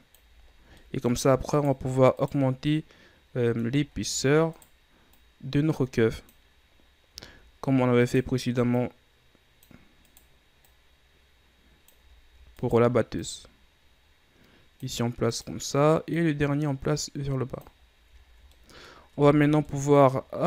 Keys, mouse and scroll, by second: 0.5-0.9 ctrl+scroll up 6, 0.9 middle click, 1.6 right click, 2.3 right click, 2.8-3.9 middle drag, 3.9-4.7 ctrl+scroll up 5, 4.7 right click, 5.2-7.4 drag, 7.4-8.1 ctrl+scroll up 4, 8.1 right click, 8.8-10.2 drag, 10.2 right click, 10.7-12.2 drag, 12.2 ctrl+scroll up 4, 12.7 right click, 13.2-15.4 drag, 15.4 right click, 16.3-18.0 drag, 18.0-18.6 scroll down 3, 18.6-19.2 middle drag, 19.2 Tab, 19.5 scroll down 2, 19.8-20.4 middle drag.